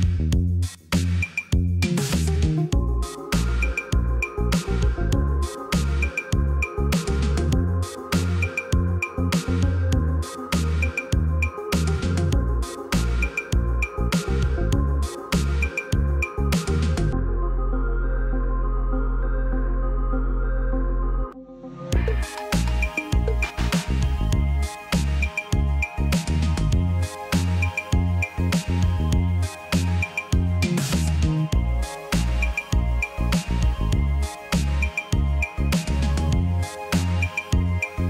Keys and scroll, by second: 1.6 Escape, 3.0 \, 5.0 Delete, 7.7 t, 9.1-9.9 typing, 12.6 \, 13.6 p, 16.5 Caps_Lock, 18.7 t, 20.4 typing, 20.8 Return, 24.4 l, 30.7 \.